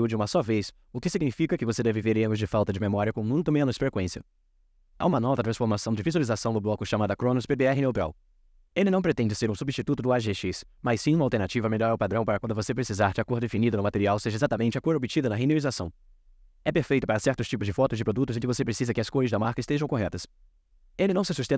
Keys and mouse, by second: 5.4-7.4 drag, 10.3 click.